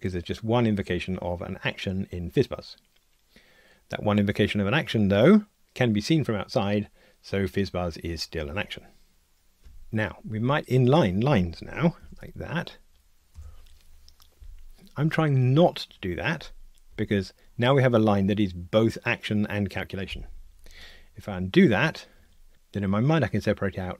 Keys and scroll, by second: 12.0 alt+super+n, 21.7 super+z.